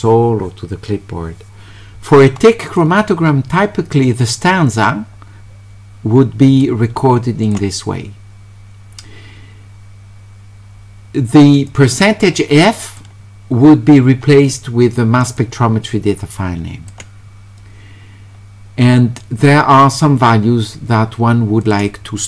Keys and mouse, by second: 2.7 click, 4.7-6.6 drag, 7.4 click, 11.7-13.0 drag, 15.2 click, 15.4-16.9 drag, 21.6 click.